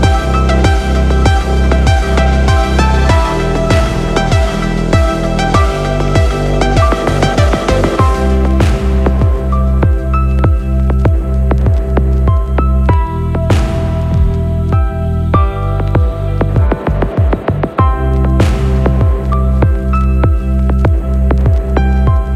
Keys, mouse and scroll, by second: 9.9 click, 11.7 middle click, 19.3 shift+middle click, 21.0-21.4 scroll up 1, 21.4 shift+middle click.